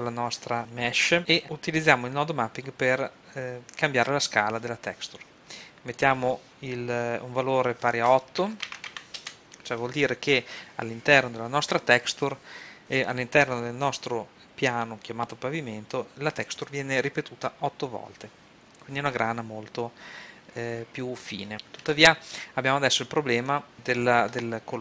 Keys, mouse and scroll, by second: 1.4-2.7 drag, 5.9-7.7 drag, 11.0 middle click, 23.5 click.